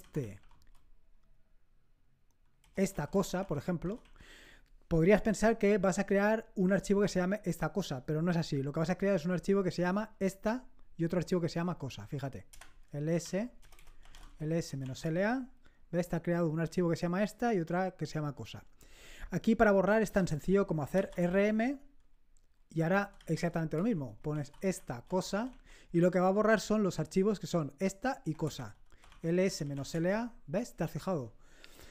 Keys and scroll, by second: 0.0-0.7 typing, 2.5-4.4 typing, 12.5 Return, 12.8-15.2 typing, 20.6-21.5 typing, 22.6-25.9 typing, 28.4 Return, 28.7-30.2 typing.